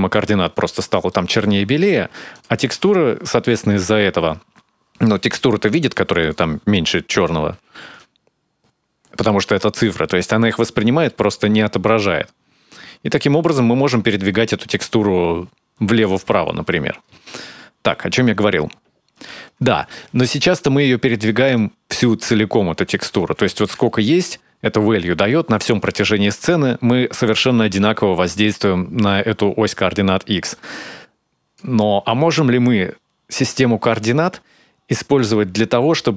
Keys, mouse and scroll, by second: 0.9 middle click, 1.5-2.0 scroll down 4, 2.2 ctrl+shift+click, 7.8 shift+click, 16.8-18.9 scroll down 8, 18.9-20.0 scroll up 3, 20.0-21.0 scroll up 3, 21.3 shift+click, 30.3 click.